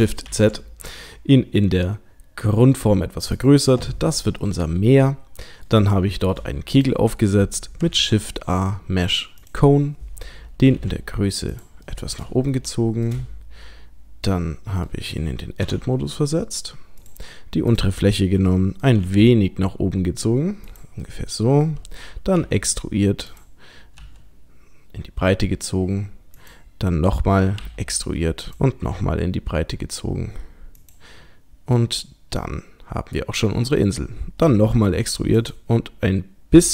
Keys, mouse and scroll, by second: 4.4 middle click, 5.9 shift+middle click, 6.8 click, 7.9 shift+a, 10.7 g, 11.9 middle click, 12.5 shift+middle click, 13.2 scroll up 2, 14.2 middle click, 14.2-15.3 scroll up 2, 15.7 Tab, 17.0 click, 17.7 click, 18.5 middle click, 21.1 middle click, 22.4 e, 24.0 s, 27.6 e, 28.5 click, 28.9 s, 31.8 middle click, 34.5 e.